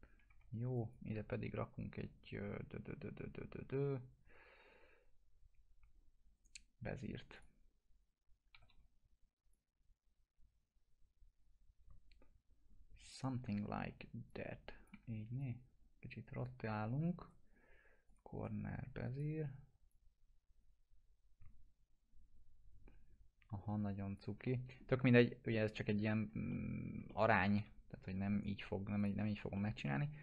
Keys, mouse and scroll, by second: 0.3 1, 0.8 click, 6.4 right click, 7.4 click, 8.5 e, 9.5-13.3 drag, 13.4 e, 13.8 w, 14.3-14.9 click, 14.9 e, 15.4-16.6 drag, 16.7 scroll up 1, 17.2 right click, 18.1 click, 18.4 right click, 19.1-24.2 drag, 24.4-25.1 middle click, 25.6 scroll down 1, 26.5-27.4 alt+middle click, 27.1 middle click, 27.6 p, 28.0 scroll down 1, 28.3 right click, 29.0 click, 29.6 alt+middle click.